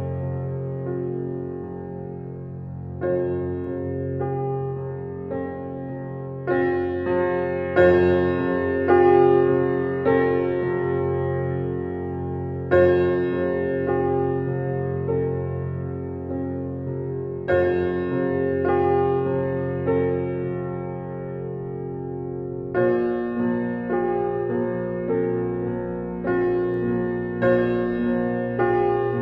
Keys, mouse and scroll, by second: 1.8 w, 2.8 click, 4.4-6.8 right drag, 6.8 click, 7.3-8.7 alt+drag, 8.7 alt+right click, 9.1 click, 9.8 right click, 10.0 right click, 10.7 click, 11.6 r, 11.9-14.4 drag, 14.4 -, 14.8 click, 15.9 alt+right click, 16.5 alt+click, 20.1-23.0 drag, 24.2-26.2 alt+drag, 26.2 right click, 27.2 click.